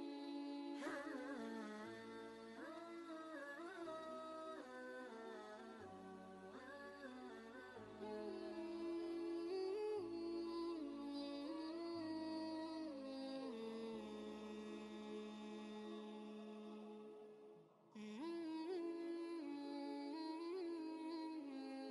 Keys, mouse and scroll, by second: 2.1 ctrl+space, 2.1 ctrl+click, 2.8 space, 2.9-4.2 drag, 4.2 ctrl+space, 4.4 ctrl+click, 4.8 ctrl+space, 4.9 click, 5.4 space, 7.3-9.0 drag, 9.0 ctrl+space, 9.2 ctrl+click, 9.5 ctrl+space, 10.6-15.7 shift+drag, 15.7-20.9 alt+drag, 20.9-21.9 alt+drag.